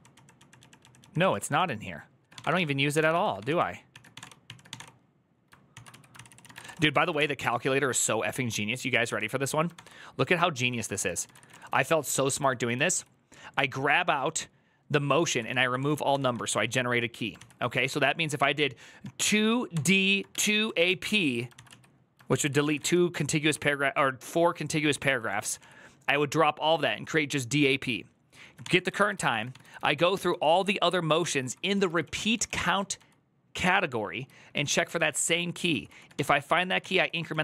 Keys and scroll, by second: 1.1-7.2 typing, 5.5 ctrl+c, 5.9 ctrl+c, 7.2 ctrl+d, 9.5 ctrl+d, 10.7 ctrl+c, 10.8 ctrl+c, 10.9-12.5 typing, 15.0-17.9 typing, 19.0-23.3 typing, 21.3 ctrl+c, 22.1 ctrl+c, 22.2 ctrl+c, 24.6-25.4 typing, 28.7 ctrl+c, 28.9-32.7 typing, 33.8-37.4 typing.